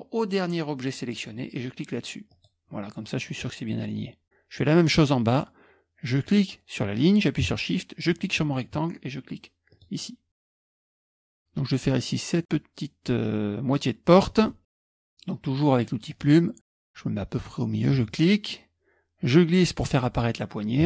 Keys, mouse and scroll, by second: 2.3 click, 4.3 middle click, 4.5-6.1 drag, 8.1 shift+click, 10.7 middle click, 10.9 KP_Subtract, 11.0 KP_Subtract, 18.0-20.8 drag.